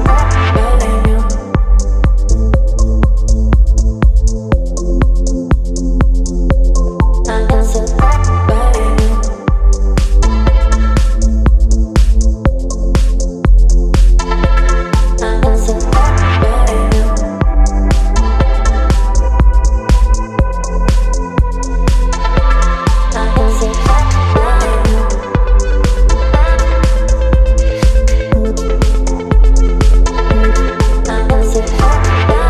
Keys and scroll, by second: 19.0 space, 21.7 KP_9, 25.4 ctrl+z.